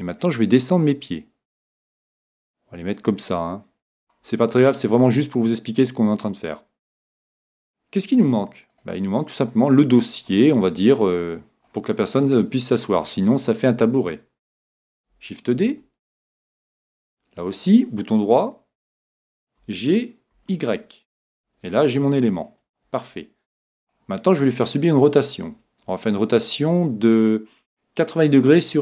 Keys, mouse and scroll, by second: 4.6-6.5 middle drag, 8.3-14.1 middle drag, 8.7 right click, 15.6 shift+d, 17.8 right click, 19.6 g, 22.7-24.4 drag, 23.1-24.9 middle drag.